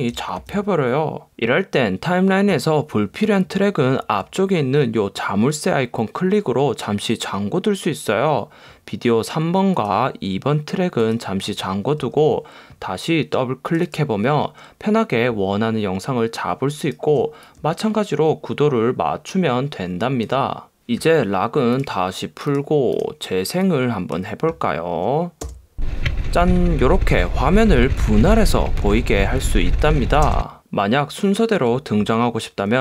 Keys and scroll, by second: 0.5 super+z, 25.7 space, 30.5 space.